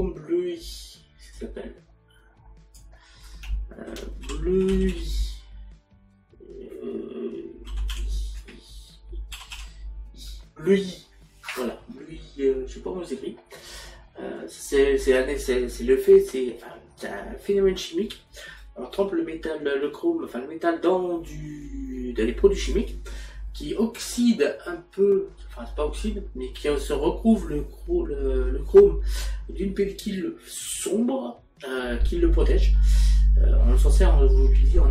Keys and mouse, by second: 0.3 click, 8.1 i, 8.4 BackSpace, 9.4 l.